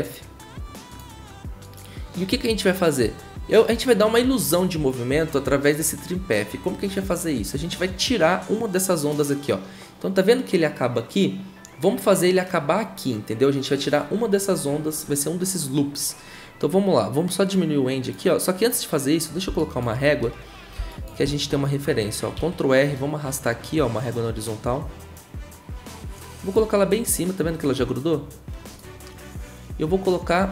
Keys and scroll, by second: 22.3 ctrl+r.